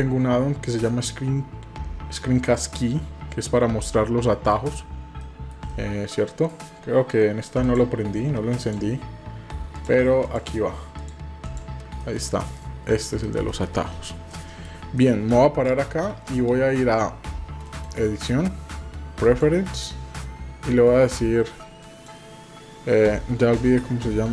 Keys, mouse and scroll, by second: 11.5 click, 12.0 middle click, 12.6 middle click, 13.2 middle click, 13.5 middle click, 14.3 middle click, 15.0 middle click, 17.6-19.5 drag.